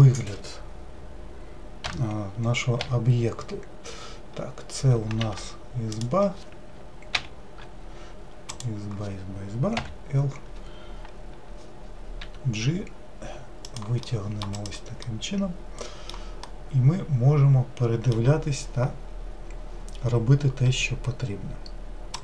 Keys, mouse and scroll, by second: 1.9 o, 2.8 l, 5.3 3, 6.0-7.2 drag, 7.2 ctrl+l, 8.5-9.8 drag, 9.8 l, 12.2 g, 14.1-14.6 middle drag, 14.6-15.2 drag, 15.2-22.2 middle drag.